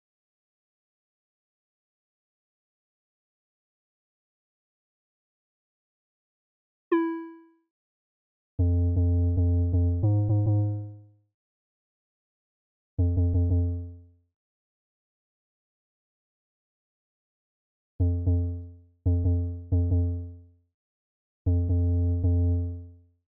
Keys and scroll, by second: 3.2-6.0 typing, 10.8 v, 12.1 v, 12.4 x.